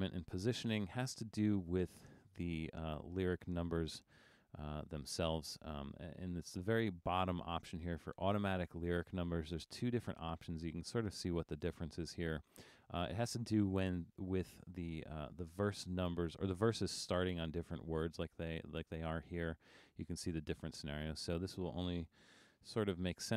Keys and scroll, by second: 22.5 super+=, 23.1 super+=.